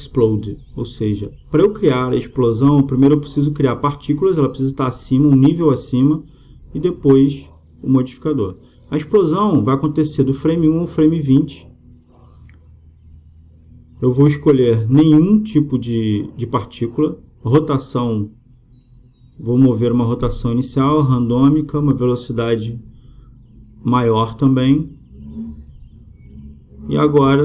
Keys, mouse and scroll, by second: 7.2-10.3 drag, 16.2-18.0 drag, 17.9 middle click, 18.4-24.9 drag.